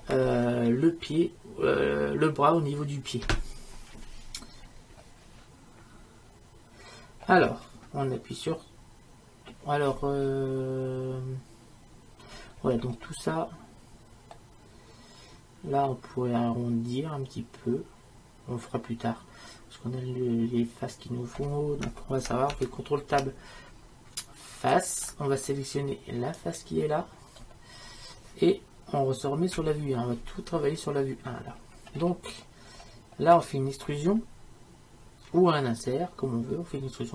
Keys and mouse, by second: 14.4-16.5 middle drag, 17.9 middle click, 23.2 ctrl+Tab, 26.4-29.6 right drag, 29.6 KP_1, 31.9 middle click, 33.1-37.1 middle drag.